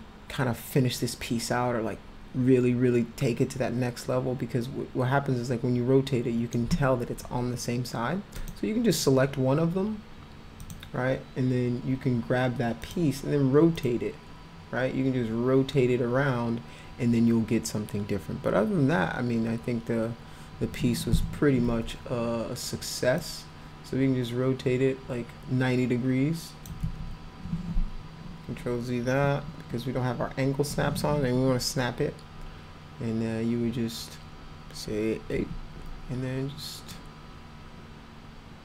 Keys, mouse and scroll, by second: 8.4 click, 10.6 click, 12.8 click, 13.8 click, 21.2 e, 23.2-26.7 drag, 26.9 ctrl+z, 35.4 a, 36.9-38.6 drag.